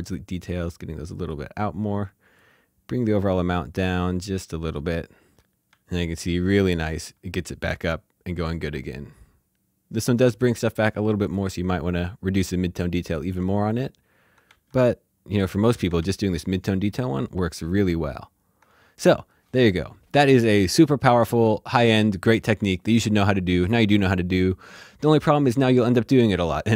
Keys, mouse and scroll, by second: 4.2 scroll down 1, 4.3 scroll up 2, 4.6 alt+shift+z, 4.7 shift+middle click, 5.3 ctrl+d, 5.7 ctrl+d, 11.2 click, 13.0 click, 14.4 ctrl+d, 15.5 click, 16.0 ctrl+d.